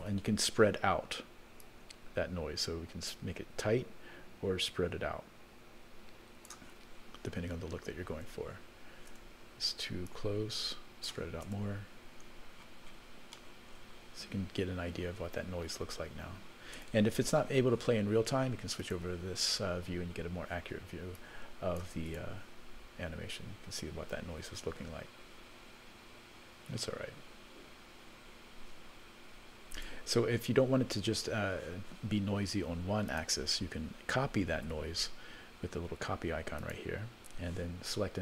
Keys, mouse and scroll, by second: 1.6-6.5 drag, 8.1 space, 9.1 space, 10.0-11.1 drag, 11.4 space, 12.5-13.3 scroll down 17, 13.3 middle click, 16.8 space, 18.8 click, 20.0-21.2 scroll up 2, 21.2 click, 22.1 space, 29.7 space, 33.0-34.7 drag, 36.6 click.